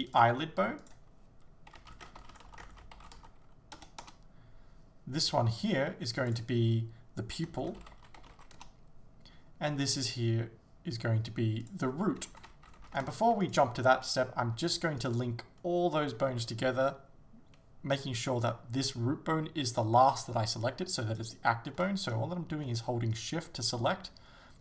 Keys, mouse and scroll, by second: 4.0-5.5 drag, 4.1 Return, 5.5 right click, 8.6-9.9 drag, 8.7 Return, 9.9 right click, 13.5 shift+right click, 15.1 shift+right click, 22.1 right click, 23.2 shift+right click.